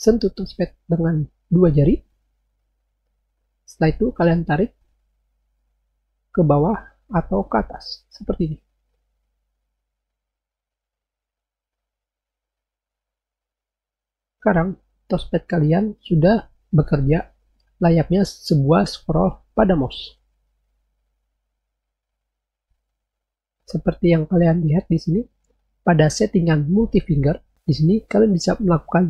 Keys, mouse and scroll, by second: 6.3-7.5 scroll down 4, 7.6-9.1 scroll up 2, 9.1-10.1 scroll down 2, 10.1-11.1 scroll up 2, 11.2-12.4 scroll down 2, 12.4-13.1 scroll up 2, 13.2-13.7 scroll down 2, 13.7-14.3 scroll down 1, 14.4-15.1 scroll down 2, 15.1 scroll down 1, 15.2-16.1 scroll up 2, 16.4-17.7 scroll down 2, 17.8-19.2 scroll up 2, 19.3-20.6 scroll down 2, 20.6-21.6 scroll up 2, 21.6-22.5 scroll down 2, 22.7-23.4 scroll down 2.